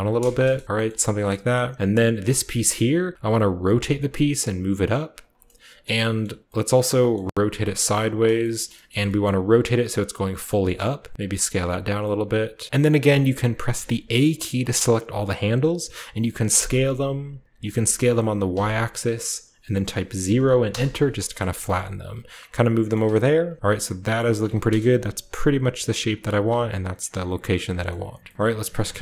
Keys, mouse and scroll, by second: 0.0-0.6 typing, 0.9 shift+middle click, 2.2 click, 2.9-4.5 typing, 3.9 click, 5.2 click, 7.3 r, 8.0 click, 8.2-8.8 scroll down 1, 8.8 shift+scroll up 1, 9.3-11.3 typing, 9.8 click, 9.9 middle click, 9.9-10.3 scroll up 1, 11.2 click, 11.6 click, 11.9 click, 12.6 middle click, 12.6-14.1 typing, 12.7-13.8 right drag, 14.7-16.4 middle drag, 16.4 s, 18.4 y, 20.1 0, 20.6 Return, 21.3 middle click, 21.4 g, 22.2-23.4 drag, 23.4 KP_7, 23.9 g, 24.3-26.2 drag, 24.3 Tab, 24.6 KP_0, 25.4-26.2 scroll up 1, 26.2-26.9 scroll up 1, 26.2 g, 26.4 z, 26.9-28.3 drag, 27.1-28.3 scroll down 1, 27.4 a, 27.8-28.2 shift+middle drag, 28.3 ctrl+middle click, 28.3-29.0 scroll up 1, 28.5 ctrl+s.